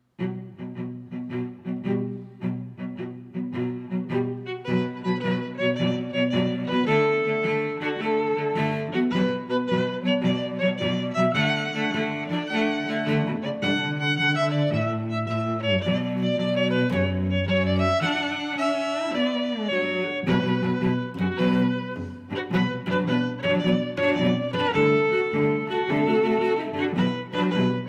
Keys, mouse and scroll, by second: 1.1 click, 2.2 click, 2.7 click, 2.8 click, 3.5 super+z, 3.6-4.9 typing, 5.1 Return, 6.1 click, 6.6 middle click, 7.2 click, 8.2 click, 8.6 click, 9.2 middle click, 9.7 click, 10.8 click, 12.5 click, 13.0 click, 13.7 click, 15.9 middle click, 16.7 click, 17.6 middle click, 18.2 click, 19.5 click, 21.5 click, 22.4 click, 22.7 click.